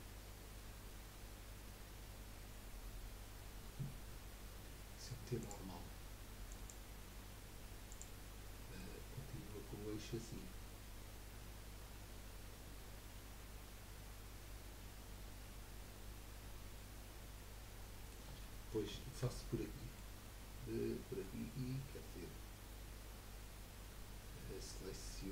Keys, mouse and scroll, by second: 5.4-8.5 drag, 8.5-12.7 middle drag, 18.4-21.4 middle drag, 21.4-21.8 scroll up 2, 21.8-24.8 middle drag.